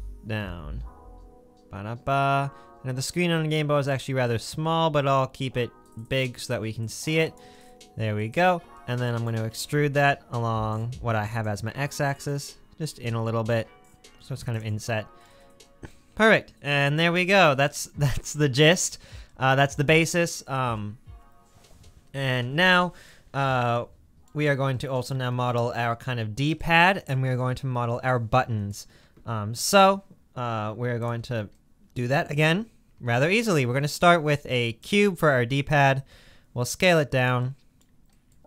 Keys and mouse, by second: 9.5 e, 14.9 middle click, 23.0 middle click, 24.4 Tab, 33.1 shift+a, 36.1 s.